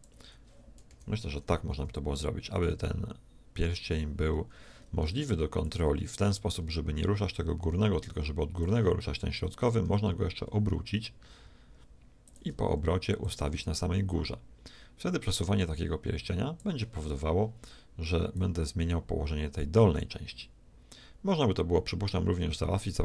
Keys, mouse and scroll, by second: 0.9 KP_1, 5.6-7.6 drag, 9.8 r, 13.2-15.0 drag, 18.4-20.2 drag.